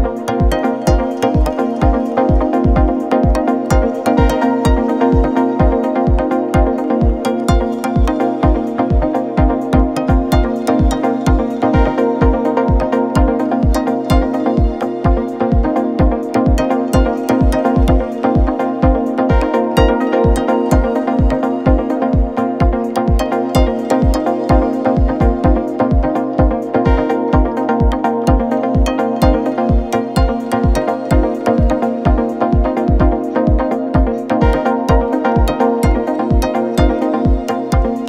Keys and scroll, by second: 7.4 ], 9.4 ctrl+F1, 30.5 ], 34.2 Delete.